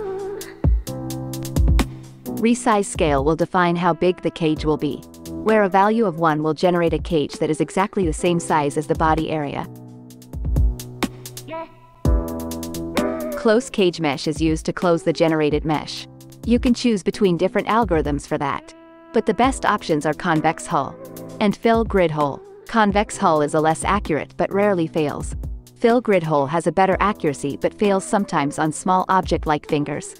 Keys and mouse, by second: 9.3-12.8 drag, 16.5-24.4 drag, 26.1 x, 26.5 click, 27.0 ctrl+Tab, 27.3 click, 27.7-30.1 drag.